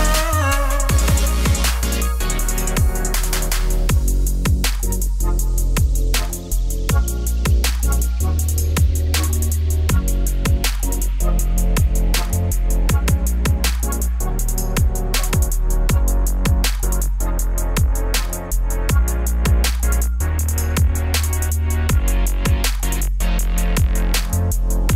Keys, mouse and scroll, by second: 0.9-3.3 scroll up 1, 3.3 scroll down 1, 3.6 ctrl+s, 3.9 click, 4.5 click, 4.6 scroll down 3, 4.7 s, 5.4 ctrl+a, 5.7 click, 5.8 ctrl+a, 8.8 shift+right click, 8.9 shift+a, 9.6 Tab, 9.7 s, 10.4 click, 10.6 click, 11.4 s, 12.2 middle click, 12.4-12.8 scroll up 1, 12.8 ctrl+r, 15.7 shift+middle click, 15.8-16.1 scroll up 1, 16.1 ctrl+b, 18.6 click, 18.8 g, 19.3 click, 19.5 g, 20.7 1, 20.9 shift+click, 21.6 ctrl+b, 24.5 Tab, 24.8-24.9 drag.